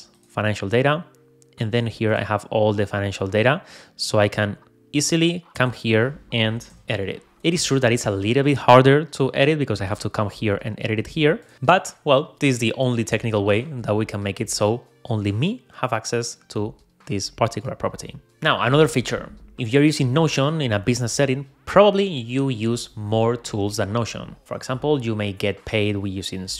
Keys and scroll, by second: 7.1 super+a.